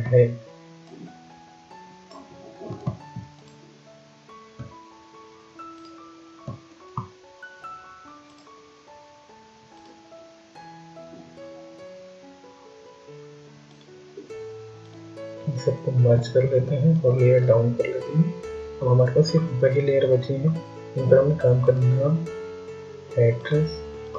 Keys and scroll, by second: 15.6 ctrl+e.